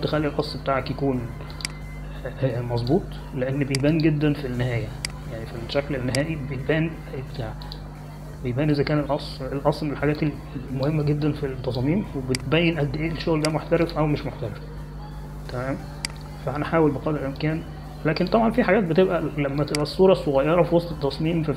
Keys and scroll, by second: 12.0 space.